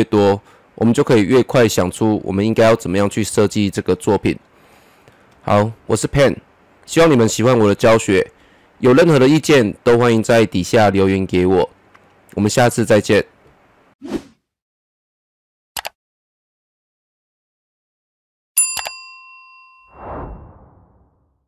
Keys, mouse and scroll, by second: 4.6-13.9 drag.